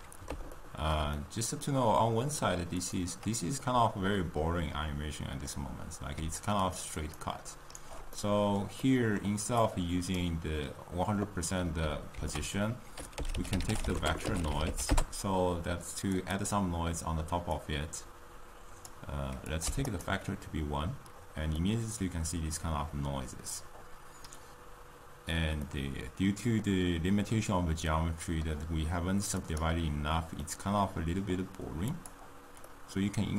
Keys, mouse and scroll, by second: 2.8 click, 3.6-6.8 middle drag, 6.8 click, 7.0-16.5 right drag, 19.0 click, 21.6-29.8 middle drag, 29.8-30.6 drag, 30.6-32.8 middle drag, 32.8 click, 33.1-33.3 middle drag.